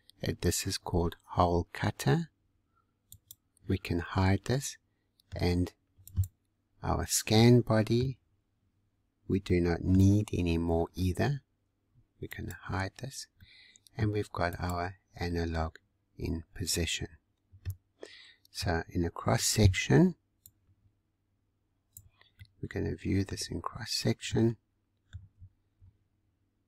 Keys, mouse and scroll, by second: 3.1 click, 4.0-4.4 scroll down 2, 4.4-6.0 middle drag, 6.0 click, 6.7 scroll up 2, 7.4-12.3 middle drag, 12.3 click, 12.9 scroll down 2, 13.4-14.5 middle drag, 14.5 click, 15.3-18.3 middle drag, 18.7 scroll down 2, 19.6 alt+b, 22.4-23.4 middle drag, 23.4-23.7 scroll up 1, 23.9 scroll up 6, 24.3-25.3 middle drag, 25.3 z.